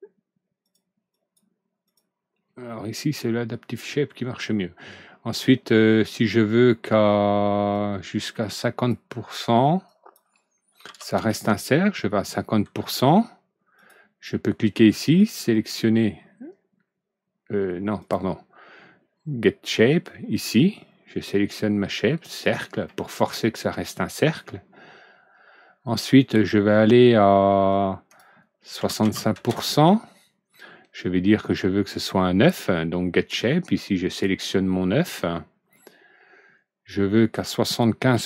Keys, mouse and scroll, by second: 0.6 click, 1.0 click, 1.8 click, 4.7 middle click, 7.6-8.8 drag, 9.8 click, 10.8 KP_5, 11.0 KP_0, 11.2 KP_Enter, 13.7 click, 15.6-15.9 middle drag, 17.9 click, 20.3 click, 22.4 click, 23.0 middle click, 27.6 click, 28.7 KP_6, 29.0 KP_5, 29.3 KP_Enter, 34.0 click, 37.3 click, 38.0 KP_7.